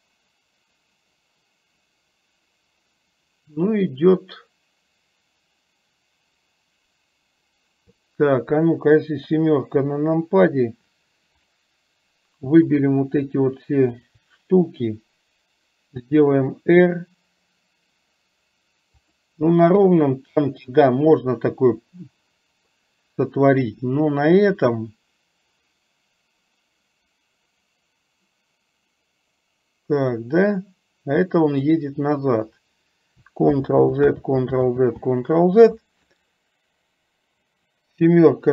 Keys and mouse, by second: 9.3 KP_7, 11.5 click, 14.0 shift+click, 19.8 KP_3, 24.8-31.8 drag, 33.5 ctrl+z, 37.7 KP_7.